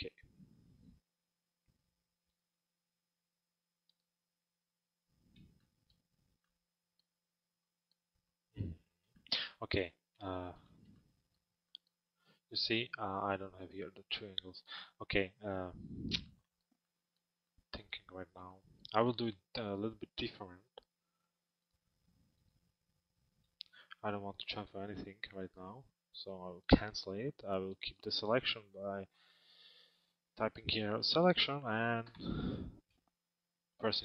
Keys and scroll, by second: 31.7 Return.